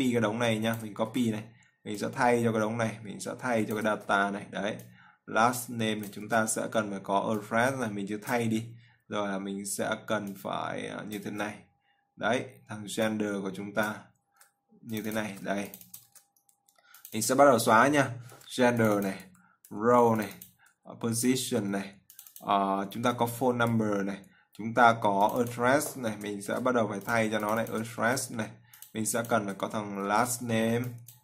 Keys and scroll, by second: 1.6 ctrl+c, 4.5 ctrl+v, 14.8 ctrl+v, 26.9 ctrl+c, 28.5 ctrl+v, 30.6 ctrl+c.